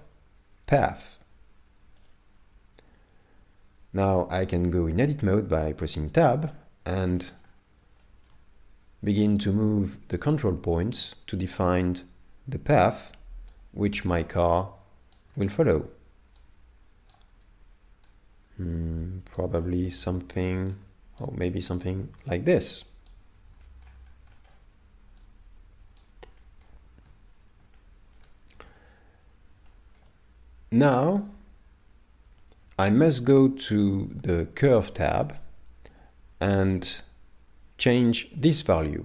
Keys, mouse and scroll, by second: 5.8 Tab, 6.4 scroll down 4, 7.2 shift+middle click, 8.0 shift+middle click, 9.4 right click, 11.0 right click, 13.5 right click, 14.6 right click, 15.3 shift+middle click, 16.4 right click, 16.6 right click, 18.1 right click, 19.6 shift+middle click, 20.7 right click, 22.0 right click, 23.6 shift+middle click, 23.9-24.3 scroll down 2, 24.3 shift+middle click, 25.2 middle click, 25.3 right click, 26.4 shift+middle click, 27.7 middle click, 29.7 shift+middle click.